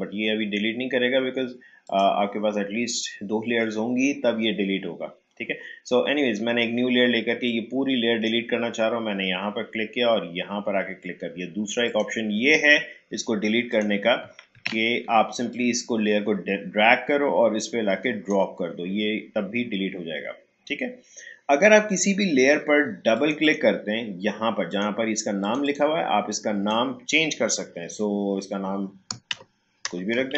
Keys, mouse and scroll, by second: 1.8 click, 7.4-10.7 drag, 11.8 click, 14.5 ctrl+z, 15.5-20.6 drag, 23.1-29.3 drag, 29.3-30.3 typing.